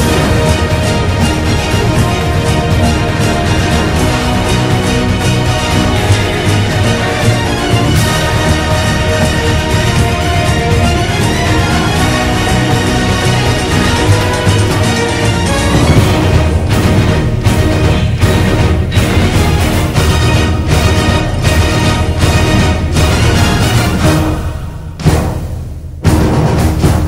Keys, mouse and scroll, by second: 0.1 ctrl+=, 1.2 ctrl+z, 1.9 ctrl+-, 2.4 ctrl+=, 4.6 right click.